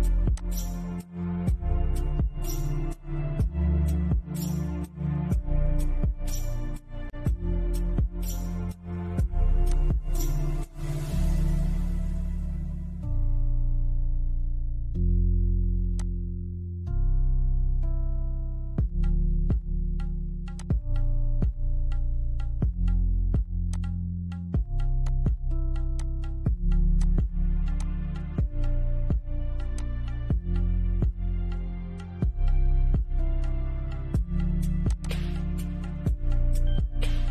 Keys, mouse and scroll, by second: 0.2 scroll down 1, 3.6 scroll down 1, 4.1-8.9 middle drag, 8.9 click, 15.2 click, 17.3 typing, 19.8 click, 19.8 typing, 22.9 click, 22.9 typing, 24.8-25.2 scroll down 1, 25.2 click, 25.8 scroll up 1, 26.2 click, 27.6-27.9 scroll down 1, 29.0 click, 30.9 shift+middle click, 31.9-34.1 shift+middle drag, 34.1 click, 35.3-35.9 scroll down 1.